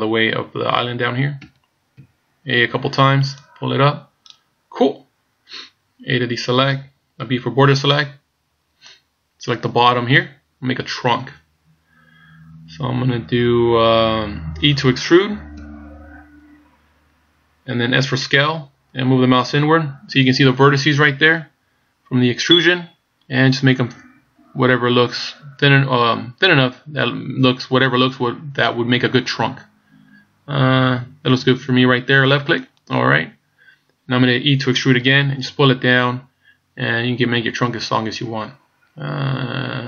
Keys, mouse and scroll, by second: 1.4 a, 2.0 a, 3.4 click, 6.2 a, 7.3 b, 15.6 e, 35.0 e.